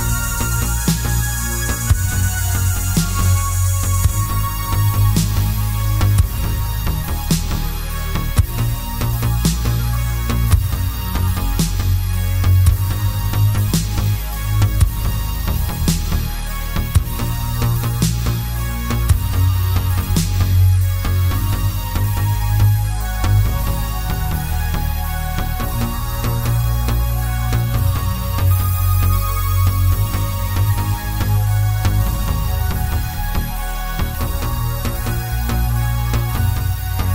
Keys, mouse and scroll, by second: 0.4-0.9 scroll down 1, 0.9 ctrl+g, 2.5 KP_7, 3.2 shift+d, 4.2 click, 4.4 r, 7.6 Escape, 8.0 r, 8.9 KP_Enter, 9.6-13.0 middle drag, 11.1 KP_3, 11.7 g, 14.9 click, 15.1 middle click, 15.8 KP_7, 16.6 shift+z, 17.7 g, 20.0 click, 20.3 s, 22.0 click, 22.2-26.0 middle drag, 22.9 shift+z, 23.6 KP_Decimal, 24.5 s, 26.0 click, 26.6 s, 29.4 click, 29.5 g, 31.0 click, 31.6-31.9 scroll down 1, 31.9-37.1 middle drag, 32.3 scroll down 1, 34.5 scroll down 1, 36.6-37.1 scroll down 2.